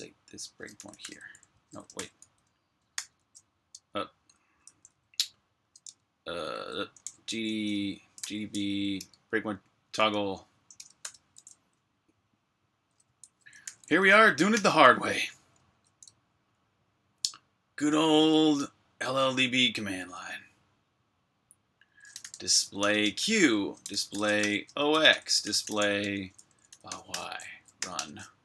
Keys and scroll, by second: 0.0-4.6 typing, 5.7 Escape, 6.4-10.9 typing, 13.1-14.4 typing, 21.8-28.0 typing.